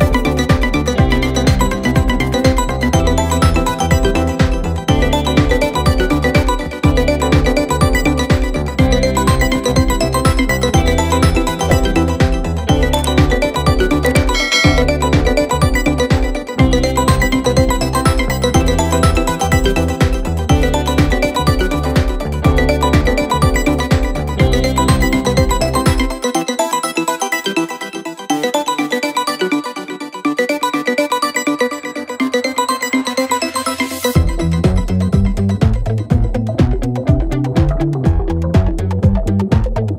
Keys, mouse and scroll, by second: 0.2 g, 1.3 click, 1.5-3.0 middle drag, 3.6 click, 3.8-4.3 right drag, 4.3 click, 4.4-5.1 right drag, 5.1 click, 5.5 shift+click, 5.8 shift+click, 6.0 shift+click, 6.3 shift+click, 6.5 shift+click, 6.8-7.4 middle drag, 7.4 shift+click, 7.8 shift+click, 8.3 shift+click, 8.7 shift+click, 8.8-9.4 middle drag, 9.4 shift+click, 9.6-10.3 middle drag, 10.3 shift+click, 11.4 ctrl+j, 11.8-13.0 right drag, 13.0 click, 13.6 scroll up 1, 13.7-14.7 scroll down 3, 14.7 r, 16.9 ctrl+z, 17.5 click, 17.8 shift+click, 19.0 shift+click, 19.4 shift+click, 19.9 ctrl+j, 20.7-21.3 middle drag, 21.3 t, 21.5 z, 22.5 t, 23.7 r, 26.1-27.5 drag, 27.5 g, 28.3-29.0 middle drag, 29.0 ctrl+z, 29.1 ctrl+z, 29.5-29.9 scroll down 2, 29.9 click, 30.0-31.0 middle drag, 31.0 click, 31.6 KP_3, 32.1 KP_1, 32.8 s, 33.5-34.1 scroll up 4, 34.1 g, 35.7 g, 38.1-39.8 drag.